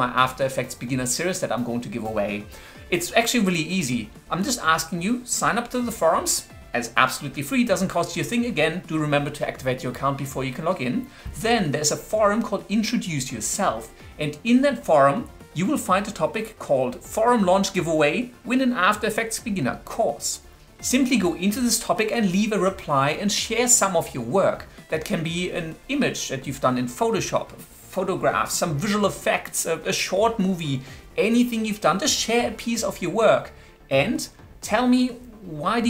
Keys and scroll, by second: 22.0-23.2 typing.